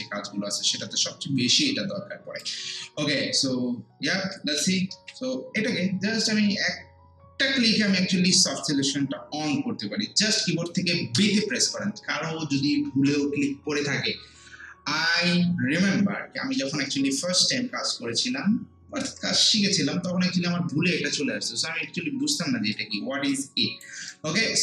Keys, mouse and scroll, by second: 0.6-2.9 drag, 2.9 scroll down 1, 4.1-4.4 scroll up 1, 4.4 alt+middle click, 5.0 ctrl+z, 11.2 b, 23.3 alt+click, 24.1 alt+right click.